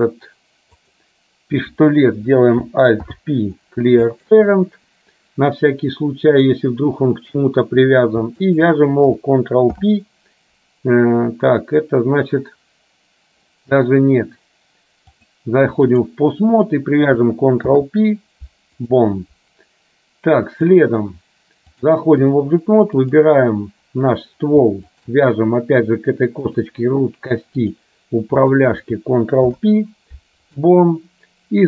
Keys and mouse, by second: 0.9 click, 3.2 alt+p, 8.7 shift+click, 9.8 ctrl+p, 15.4 click, 17.8 ctrl+p, 20.8 click, 21.9 click, 26.5-27.9 drag, 28.5 click, 29.5 ctrl+p.